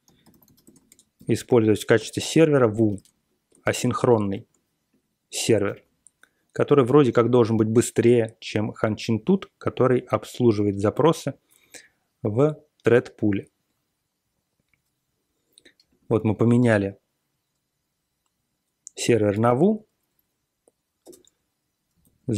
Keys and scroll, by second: 0.0-2.4 typing, 2.8 ctrl+x, 2.9 ctrl+s, 3.6 ctrl+g, 4.3 ctrl+g, 5.6 ctrl+x, 5.7 ctrl+s, 16.1 ctrl+c, 16.3 ctrl+c, 18.8 Page_Down, 19.3 ctrl+x, 21.0 Return, 22.0 alt+p.